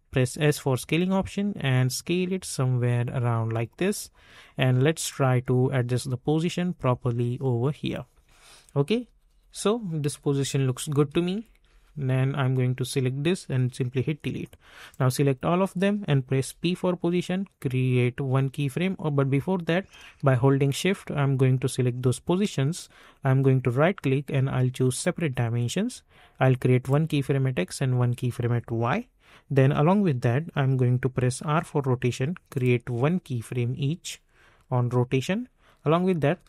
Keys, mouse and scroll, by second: 0.2 s, 1.0-8.8 drag, 8.8 Up, 10.1 Left, 11.0 Up, 11.6 Left, 12.9-16.3 drag, 16.3 p, 19.5 click, 23.2 right click, 24.9 click, 28.7 typing, 31.4 typing, 32.5 click, 36.3 s.